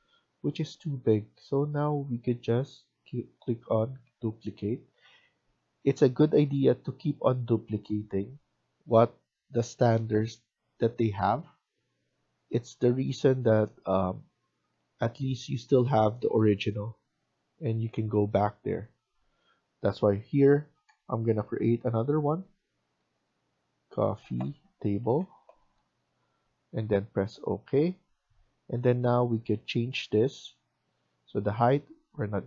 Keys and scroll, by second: 22.4-22.9 typing, 25.6 typing, 29.5-30.2 typing.